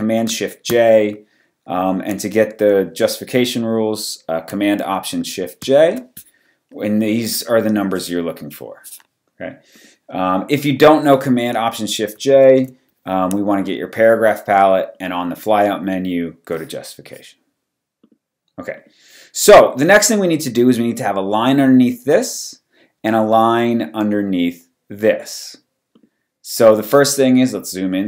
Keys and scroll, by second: 0.8 shift+super+j, 5.6 alt+shift+super+j, 12.3 alt+super+t, 27.6 super+=.